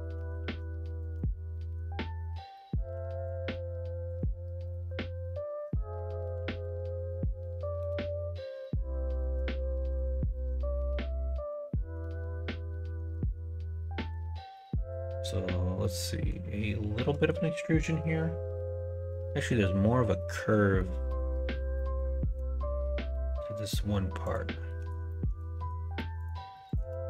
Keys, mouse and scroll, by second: 0.0 ctrl+z, 0.4 ctrl+r, 1.6 middle click, 2.2 middle click, 3.6 middle click, 4.6 middle click, 5.2 middle click, 6.3 k, 7.9 middle click, 9.1 alt+shift+click, 9.6 2, 10.0 click, 10.6 middle click, 12.8 3, 13.0 click, 13.3 middle click, 14.1 shift+click, 15.8 middle click, 17.0 middle click, 19.6 middle click, 20.7 middle click, 21.8 middle click, 24.2 click, 25.1 middle click, 25.5 3, 26.2 shift+click, 26.9 shift+middle click.